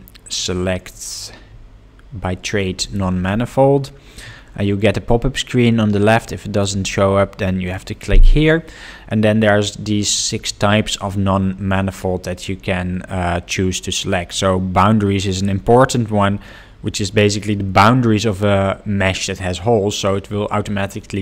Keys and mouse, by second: 6.5 click, 7.6 click.